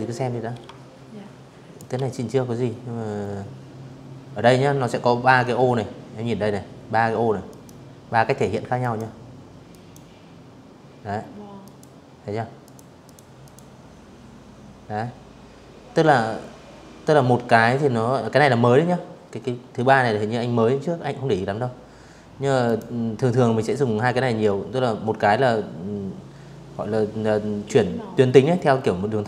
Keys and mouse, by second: 5.2 click, 6.5 click, 7.4 click, 9.3 click, 10.3 click, 10.7 click, 11.1 click, 20.3 click, 27.5 click, 27.6 click, 29.1 click.